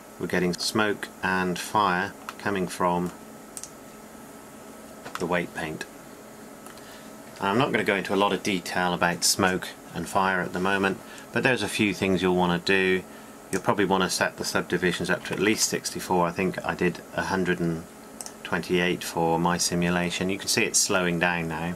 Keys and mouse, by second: 3.7-5.5 drag, 13.7-21.7 drag.